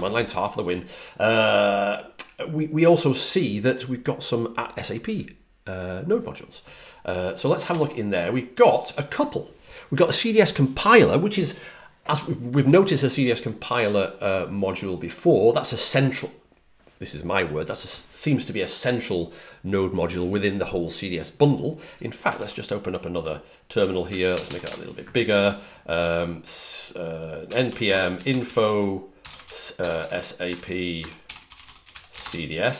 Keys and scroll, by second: 7.5 l, 22.2 super+t, 24.2 super+=, 24.3 super+=, 24.5 super+=, 27.3-29.6 typing, 31.1-32.5 typing.